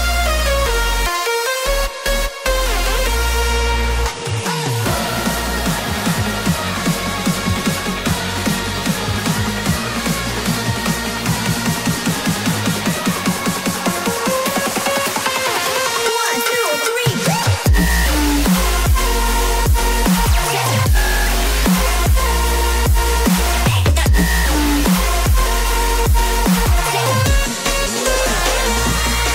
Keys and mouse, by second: 3.8 click, 8.3 click, 9.8-10.7 middle drag, 11.0 click, 11.5-11.8 shift+middle drag, 12.0-15.2 middle drag, 15.5-16.1 shift+middle drag, 17.3-23.2 drag.